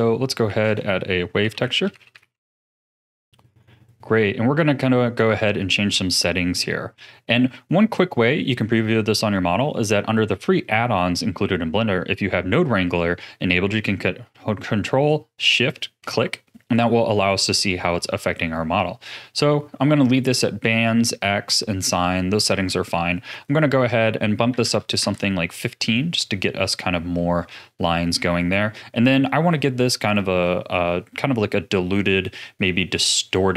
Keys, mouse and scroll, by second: 0.4 shift+a, 5.7-6.1 scroll up 5, 6.1-9.2 middle drag, 15.5 ctrl+shift+click, 17.5-18.7 middle drag, 18.7-20.0 scroll up 4, 23.2-26.0 drag, 26.0-29.0 middle drag, 29.9-33.5 middle drag.